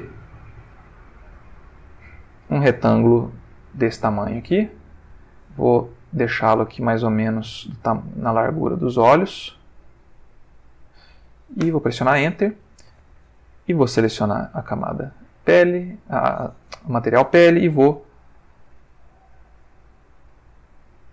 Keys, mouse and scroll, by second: 5.7-7.5 drag, 8.3 click, 9.9 click, 11.6 Return, 13.5 click, 14.3 click, 15.9 click.